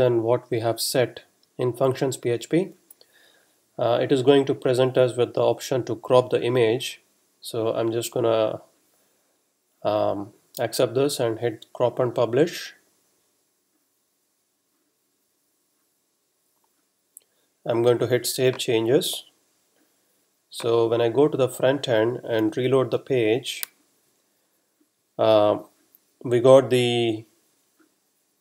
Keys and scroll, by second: 22.4 r.